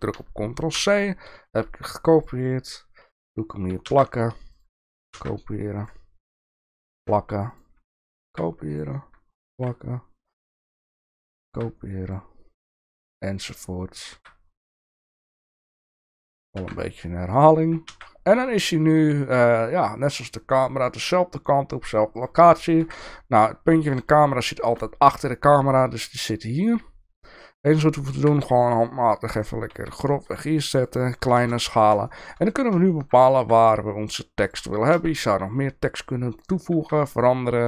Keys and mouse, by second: 0.8 ctrl+c, 3.9 ctrl+v, 5.1 ctrl+c, 5.8 click, 6.9 ctrl+v, 7.5 click, 8.2 ctrl+c, 8.7 click, 9.5 ctrl+v, 10.5 click, 11.5 ctrl+c, 12.7 ctrl+v, 14.1 ctrl+c, 14.6 click, 15.2 ctrl+v, 15.9 click, 16.6 ctrl+c, 17.2 click, 17.9 ctrl+v, 22.8 KP_7, 24.5 shift+middle click, 25.3 middle drag, 26.6 click, 28.2 g, 29.7 s, 31.4 KP_0, 32.1 shift+middle drag, 32.9 shift+middle click, 33.4 s, 34.9 g, 36.9 s.